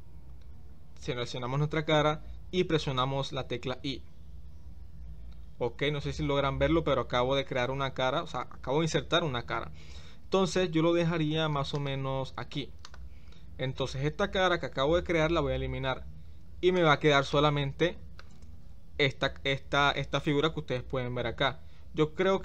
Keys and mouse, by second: 12.8 click, 15.8 x, 17.3 middle click, 21.4 Tab.